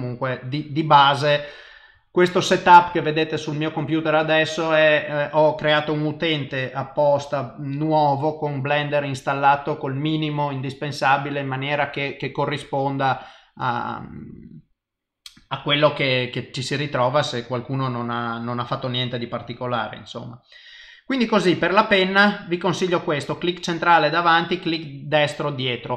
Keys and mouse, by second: 13.2 click.